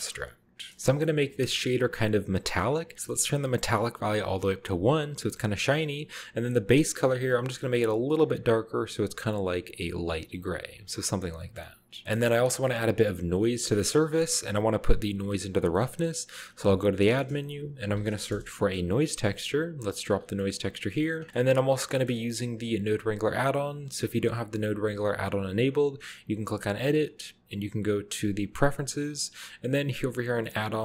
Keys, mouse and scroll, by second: 0.0 shift+a, 0.7 b, 0.8-2.0 scroll up 1, 1.4 middle click, 1.6 click, 3.2-4.5 drag, 6.1 click, 7.5-8.7 drag, 9.6 click, 11.3-13.0 scroll down 2, 11.4-12.0 middle drag, 12.1-13.1 middle drag, 13.0-14.2 scroll up 1, 13.5 middle click, 15.7-16.4 middle drag, 16.4-18.3 typing, 17.2 click, 18.7 Return, 20.1 click, 20.4-21.8 middle drag, 20.7-21.3 scroll down 1, 21.0 click, 22.1 middle click, 22.4 click, 26.4 click, 28.5 click, 29.7 click, 30.5 click.